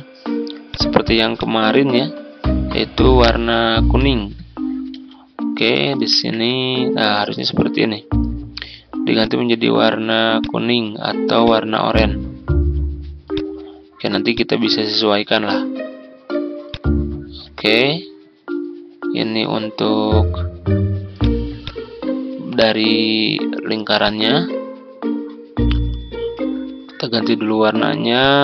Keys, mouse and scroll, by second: 4.0 ctrl+z, 5.6 ctrl+z, 9.2-17.4 drag, 18.0-25.7 drag, 26.2 ctrl+z, 28.1-28.4 drag.